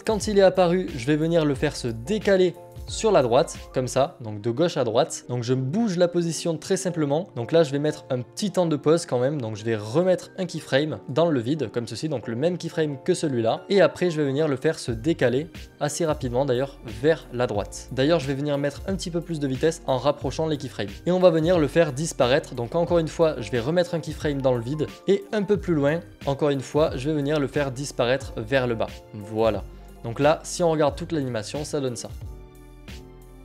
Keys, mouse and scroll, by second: 4.3 click, 9.9 click, 14.8 click, 16.3-20.4 drag, 21.0 click, 23.1-25.9 drag, 26.8 click, 28.3 click, 30.0 click.